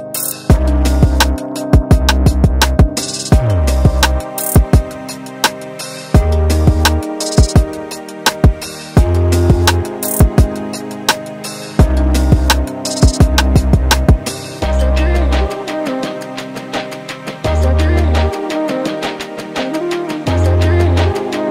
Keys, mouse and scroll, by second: 2.5 scroll down 2, 2.7 middle click, 3.9 r, 5.6 KP_7, 6.4-7.1 scroll up 1, 7.1-7.6 scroll up 2, 7.6 click, 10.4 ctrl+z, 11.2 click, 14.9 r, 16.0 middle click, 17.1 r, 21.1 click.